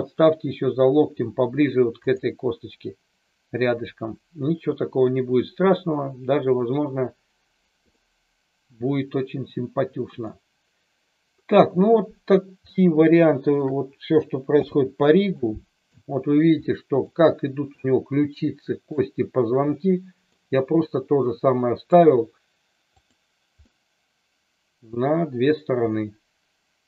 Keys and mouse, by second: 7.8-10.3 middle drag, 12.7-13.5 shift+middle drag, 14.4 n, 15.4 middle click, 16.5-17.0 middle drag, 17.8-18.9 middle drag, 19.8-20.3 middle drag, 20.9-21.9 middle drag, 23.7-24.9 middle drag, 25.9-26.8 middle drag.